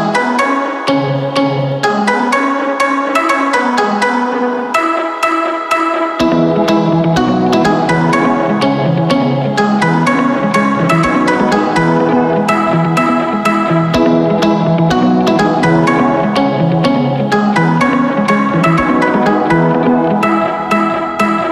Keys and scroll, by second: 2.9 typing, 3.6 Return, 15.2 3, 16.2 BackSpace, 16.4 2, 16.7 5, 17.0 Return.